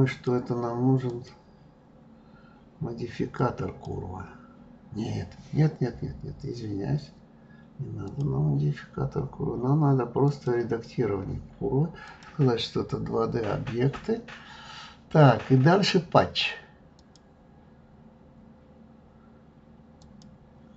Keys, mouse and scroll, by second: 0.1 click, 1.0-4.1 drag, 8.1 click, 10.2 click, 12.0 click, 16.9 click, 20.0 click.